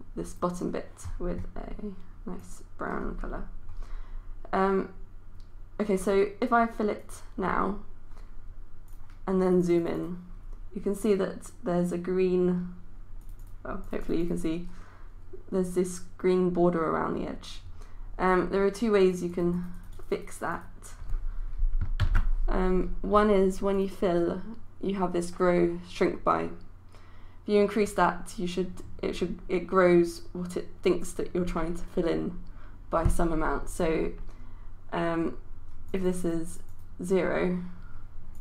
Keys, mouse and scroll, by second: 22.1 ctrl+z, 23.8 click.